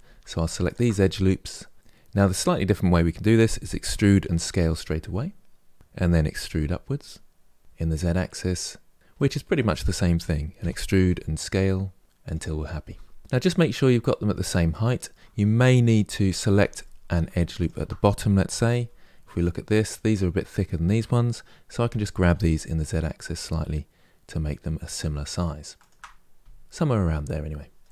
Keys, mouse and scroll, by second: 0.3 alt+click, 3.5 e, 6.2 e, 8.9-10.3 middle drag, 10.3 e, 13.2-14.4 middle drag, 16.2 3, 16.5 middle click, 17.3 alt+click, 18.4 KP_1, 21.5 g, 26.8-27.9 middle drag.